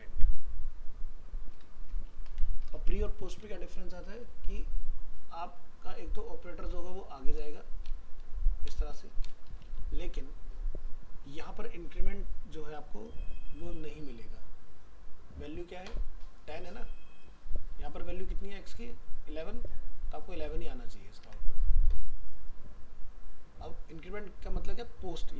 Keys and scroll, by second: 10.0 ctrl+s, 20.5 ctrl+s, 21.2 alt+Tab.